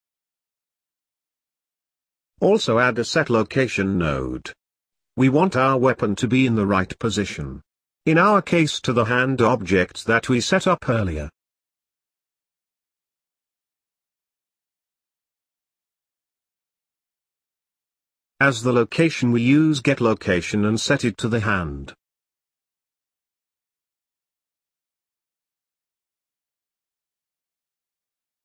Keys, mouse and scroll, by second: 27.9-28.4 middle drag.